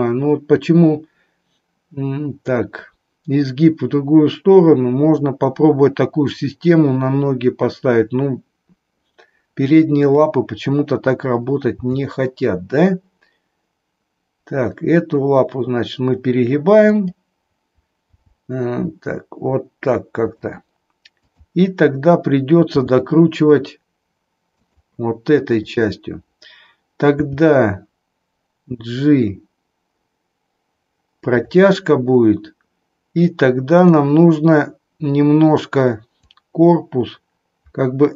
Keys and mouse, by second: 10.0 click, 11.7 g, 18.1 g, 21.2-22.2 drag, 22.7 r, 25.6 click, 27.2 g, 33.6-34.6 drag, 36.2-38.1 drag.